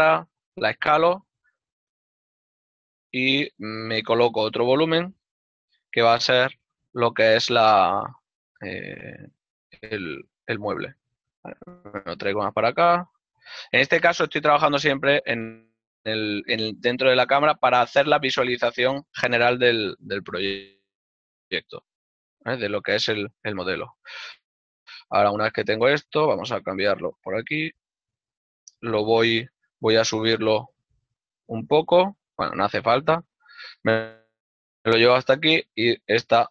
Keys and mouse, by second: 0.9 s, 5.1 x, 13.0 shift+middle click, 13.7 y, 14.4 click, 15.1 x, 19.7 right click, 20.0 x, 25.8 right click, 27.5 click, 32.2 right click, 33.2 e.